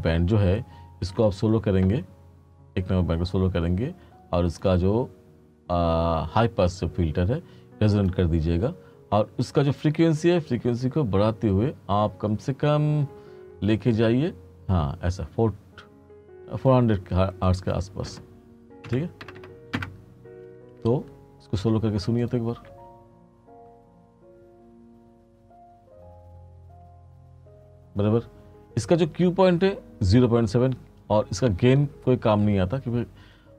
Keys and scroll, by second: 19.0 4, 19.3 0, 19.8 Return, 22.8 space.